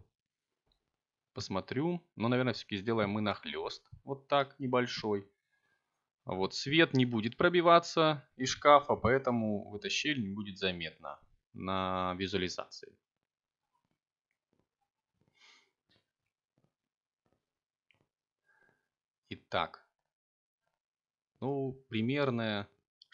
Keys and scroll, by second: 19.8 Tab.